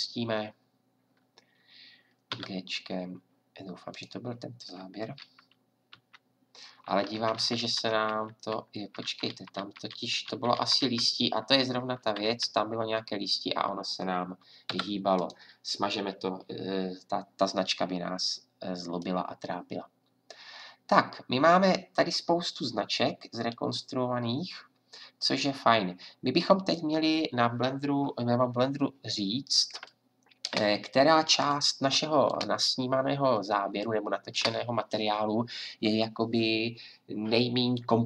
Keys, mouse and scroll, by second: 2.3 g, 5.9 Left, 6.9 Left, 7.4 Left, 8.8 Right, 12.0 Left, 14.7 Delete, 16.1-19.1 drag, 19.3-24.1 drag, 29.8-38.0 drag.